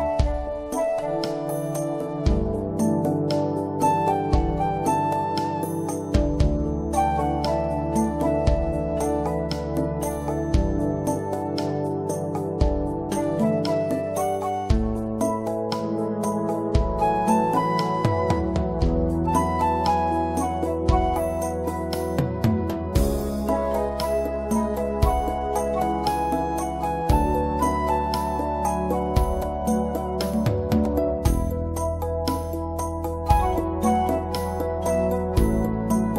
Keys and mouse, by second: 2.5 middle click, 4.9-6.8 middle drag, 7.7-9.3 middle drag, 11.7 ctrl+z, 13.1 ctrl+z, 18.6 ctrl+z, 25.7-28.9 middle drag, 32.5 shift+click.